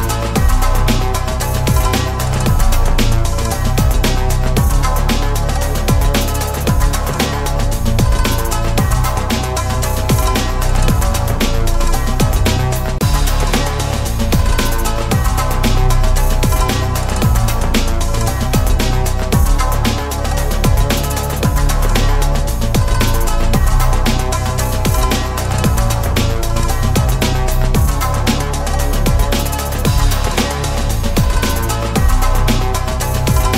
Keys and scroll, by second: 5.2 ctrl+z, 25.6 ctrl+s.